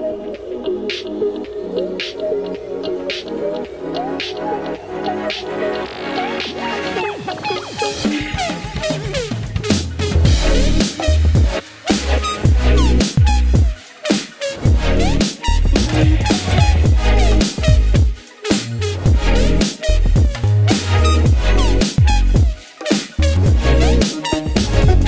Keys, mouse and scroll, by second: 3.5 click, 9.7 click, 13.9 space, 21.9 click, 24.9-25.0 drag.